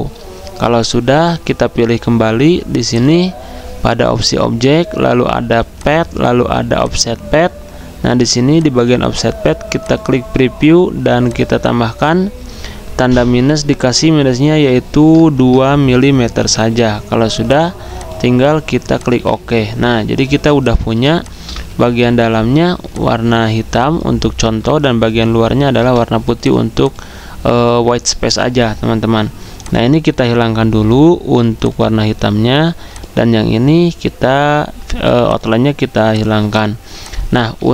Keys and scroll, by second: 12.7 -, 15.2 BackSpace, 15.2 BackSpace, 15.4 BackSpace, 16.5 2, 20.2 z, 21.5-22.7 typing.